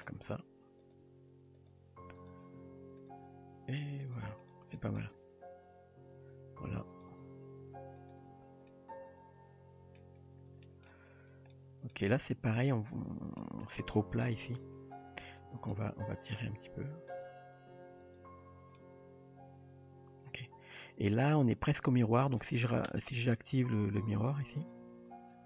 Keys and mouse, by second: 0.0 middle click, 0.3 r, 1.0 g, 1.9 r, 3.0 click, 3.6 g, 4.8 middle click, 5.2 Tab, 6.2 Tab, 6.9 click, 7.4 g, 8.2 Tab, 8.8-10.0 middle drag, 10.6 shift+middle drag, 11.3 Tab, 11.6 middle click, 12.1 Tab, 13.4 middle click, 14.7 Tab, 15.3 click, 15.7-16.4 middle drag, 16.5 g, 17.5 r, 18.8-21.2 middle drag, 22.1 shift+middle click.